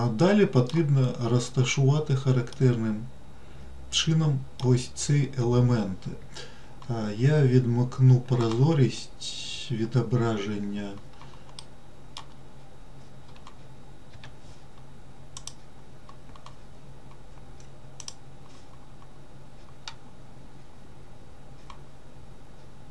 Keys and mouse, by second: 2.8-4.9 middle drag, 11.9 middle click, 14.4 Tab, 15.9-22.9 drag.